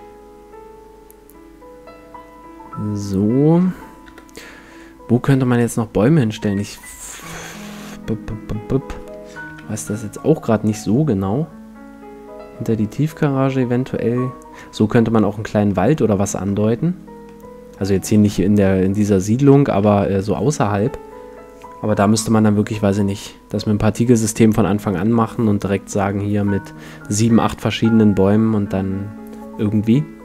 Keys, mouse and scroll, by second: 4.1 KP_7, 5.3-6.9 middle drag, 7.0 middle click, 7.6 middle click, 9.5 KP_5, 10.2-11.9 middle drag, 15.7-21.3 middle drag.